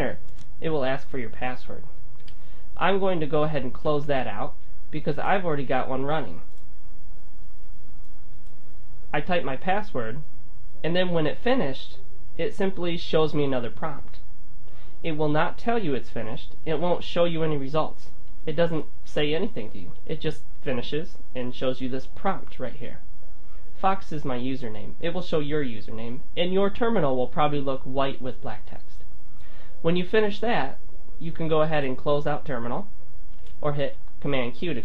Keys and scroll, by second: 3.9 super+w.